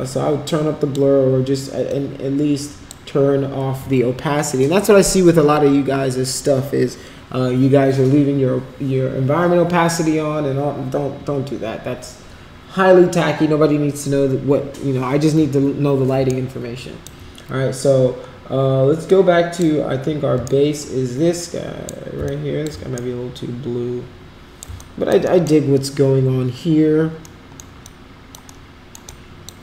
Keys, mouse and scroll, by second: 1.8-2.8 drag, 16.3 shift+right click, 19.0 click, 20.4-21.9 shift+right drag, 22.2 alt+click, 22.9-24.7 shift+right drag, 24.7 alt+click, 25.3 alt+middle click, 27.2 alt+middle click, 27.8 alt+click, 28.5 alt+middle click, 29.0 alt+click.